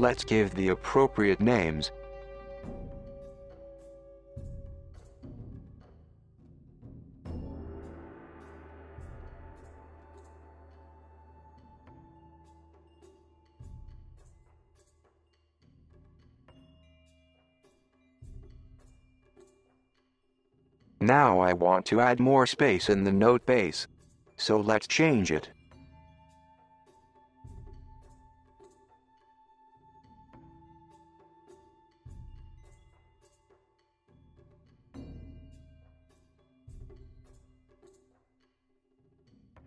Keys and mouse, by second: 1.0 click, 1.6 click, 1.8 click, 2.1 click, 2.6 shift+click, 4.6 BackSpace, 6.2 click, 6.4 click, 6.6-12.2 shift+drag, 10.7 BackSpace, 11.4 t, 12.2 Tab, 12.4 click, 12.6 click, 12.9 g, 14.1-14.4 middle drag, 14.6-15.3 middle drag, 15.5 g, 15.8 middle click, 16.2 g, 18.5 click, 19.0 middle click, 20.0 Tab, 20.7 click, 21.1 alt+click, 22.0 KP_7, 25.5 ctrl+r, 32.9 ctrl+r, 35.2 KP_1, 35.9 g, 37.3-39.0 middle drag, 39.1 super+z.